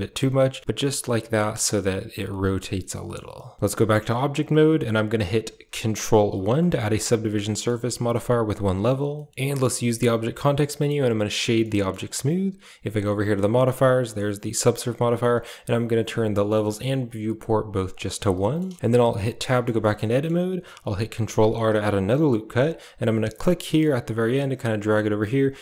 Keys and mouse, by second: 0.2 middle click, 0.6 a, 0.8 middle click, 2.7 middle click, 3.6 Tab, 6.2 ctrl+1, 6.7-7.6 middle drag, 7.8 middle click, 9.0 middle click, 9.6 w, 11.5 middle click, 13.7 click, 15.2 click, 16.0 click, 17.8 click, 18.3 middle click, 18.6 shift+middle click, 19.2 Tab, 19.3 middle click, 19.7 shift+middle click, 20.0 middle click, 20.0 click, 21.4 ctrl+r.